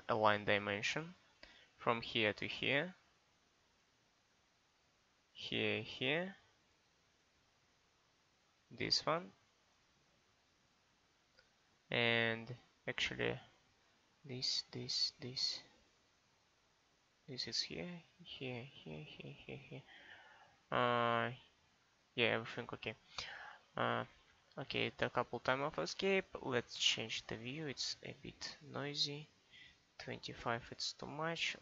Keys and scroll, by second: 24.0 Escape.